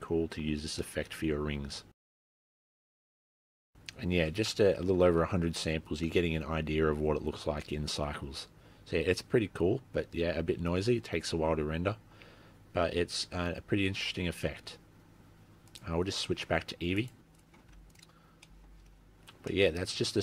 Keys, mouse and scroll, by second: 1.1 middle click, 14.2 z, 17.0 click, 17.7 z, 18.4 scroll down 2, 18.5 middle click, 19.1 middle click, 19.1-19.7 scroll up 5, 19.7 middle click, 20.1-20.2 scroll up 2.